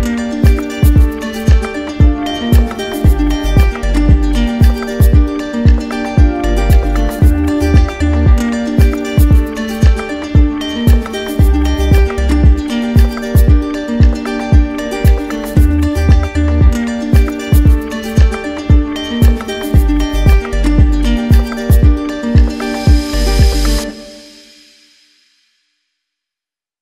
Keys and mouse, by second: 0.9 right click, 1.0 shift+click, 1.7 shift+click, 2.2 shift+click, 2.7 shift+click, 3.0 shift+click, 4.9 right click, 5.6 right click, 6.7 click, 8.9 right click, 9.4 shift+right click, 9.7 ctrl+z, 10.6 right click, 12.0 right click, 12.4 right click, 13.1 right click, 13.7 z, 14.7 click, 17.0-19.1 drag, 21.6 click, 22.7 ctrl+z, 23.0 ctrl+z, 23.2 ctrl+z, 23.5 ctrl+z, 23.9 ctrl+z, 25.2 ctrl+z.